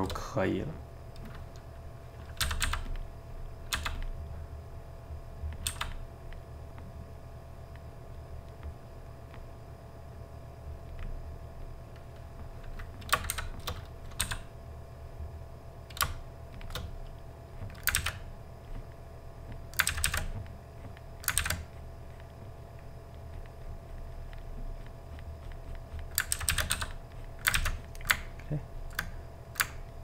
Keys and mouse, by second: 0.2-2.4 middle drag, 2.4 g, 2.6 f, 3.1 middle click, 3.8 f, 4.2 middle click, 4.7 click, 5.7 f, 6.3 click, 6.6 middle click, 7.2-8.3 drag, 8.3 middle click, 9.0-11.8 drag, 11.8-13.4 middle drag, 13.4 shift+c, 14.2 f, 16.9 middle click, 17.5 click, 18.0 ctrl+z, 18.1 middle click, 18.7-19.9 drag, 19.9 ctrl+z, 20.1 ctrl+z, 20.3-21.5 drag, 21.5 ctrl+z, 21.7 click, 22.6 middle click, 23.4-26.4 drag, 26.4 ctrl+z, 26.5 ctrl+z, 26.7 f, 27.2 click, 27.6 ctrl+z, 27.8 click, 28.2-30.0 ctrl+middle drag.